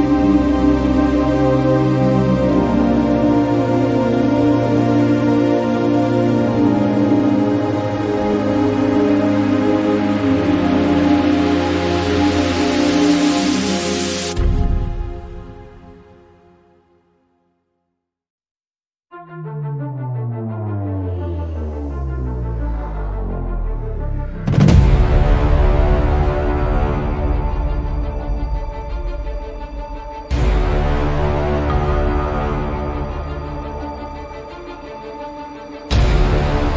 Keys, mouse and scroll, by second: 0.3 click, 1.2 shift+click, 3.0 e, 4.0 e, 5.1 e, 7.5-8.0 drag, 9.0 click, 9.8-10.1 middle drag, 11.3-11.7 shift+middle drag, 12.2 click, 13.5 click, 25.3-32.3 drag, 32.5-33.5 drag.